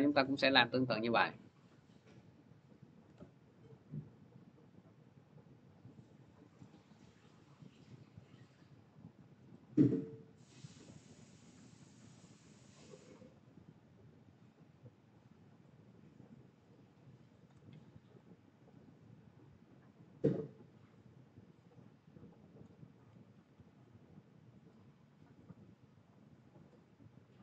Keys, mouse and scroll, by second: 0.0 s, 1.9 p, 9.5-22.4 shift+drag, 23.3 click, 23.3 s, 24.7 click.